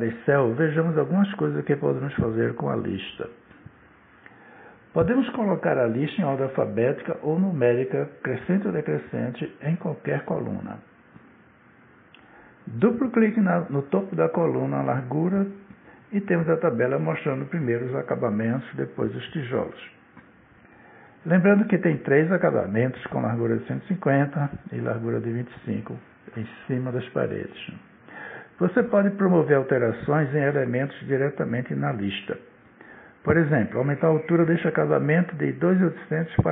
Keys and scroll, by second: 5.2 Down, 9.6 Up, 21.8 Down.